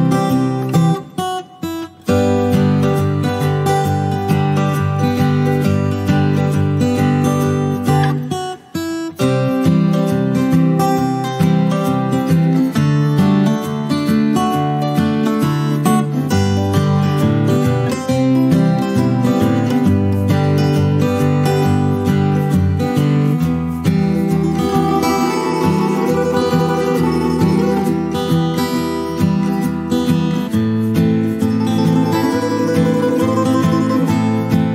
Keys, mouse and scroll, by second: 4.4-7.1 drag, 13.1 ctrl+scroll up 1, 13.6 click, 17.0 click, 17.8 typing, 18.0 Return, 18.9 click, 21.0 shift+click, 21.9 click, 24.3 p, 24.9 click, 27.2 Return, 30.7 click, 31.6-32.5 typing, 33.6 shift+click.